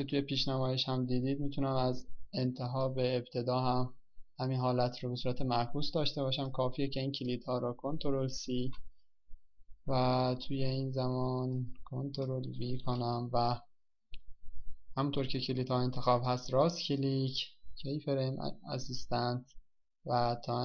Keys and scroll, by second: 11.1 ctrl+c, 15.5 ctrl+v.